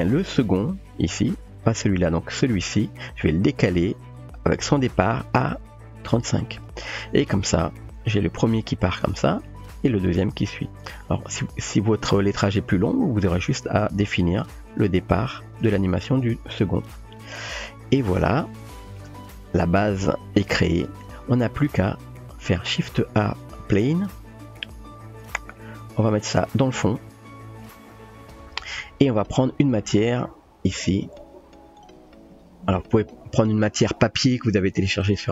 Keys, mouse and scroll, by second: 1.5 click, 2.3 click, 3.8 g, 6.5 typing, 7.3 click, 7.9 space, 15.6 click, 17.2 click, 20.9 space, 22.2 shift+a, 23.7-24.3 typing, 25.6-26.1 middle drag, 26.3 g, 27.6-28.7 drag, 32.1 click, 33.0 click, 33.3 typing.